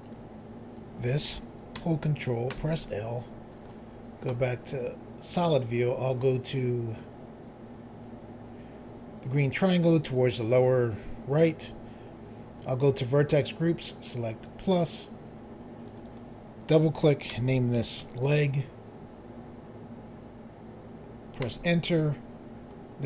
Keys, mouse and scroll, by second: 2.5 ctrl+i, 5.2 click, 9.5 click, 14.4 click, 15.9 click, 16.0 click, 17.3-18.0 typing, 21.5 Return.